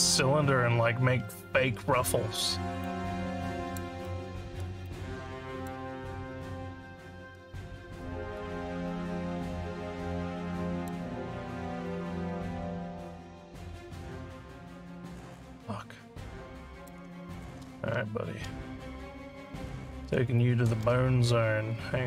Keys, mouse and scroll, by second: 2.8 alt+click, 4.0 alt+middle click, 4.8 alt+click, 8.0 alt+middle click, 8.9-10.8 alt+drag, 11.3 alt+middle click, 11.9-16.9 alt+drag, 17.3 click, 18.1 Tab, 21.2 z.